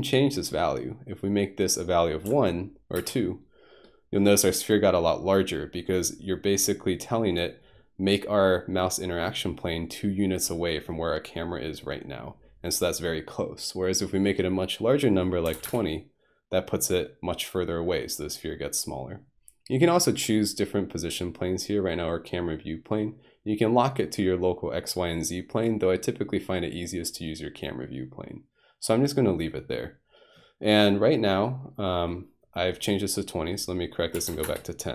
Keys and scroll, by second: 2.3 2, 3.0 Return, 15.5 typing, 15.7 Return, 34.2 typing, 34.4 Return.